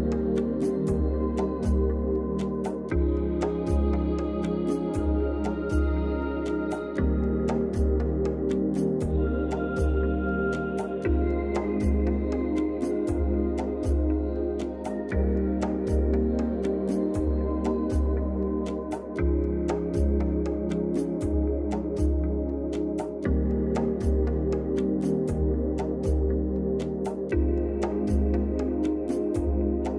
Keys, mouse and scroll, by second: 2.7-3.6 drag, 7.1 space, 7.2 click, 7.5-8.0 space, 9.7 ], 10.1 ], 10.1 ], 10.3-19.1 drag, 19.6-20.6 drag, 22.6 space, 22.6 click, 22.9-23.3 space, 25.2 [, 25.8 [, 26.1-29.8 drag.